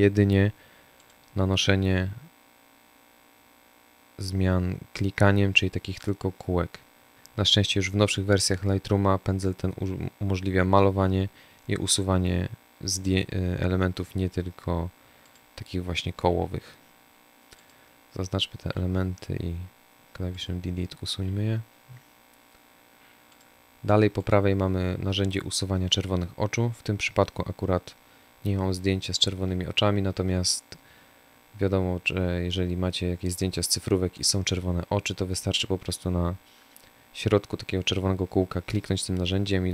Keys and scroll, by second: 15.1 Delete, 17.5 Delete, 20.0 Delete.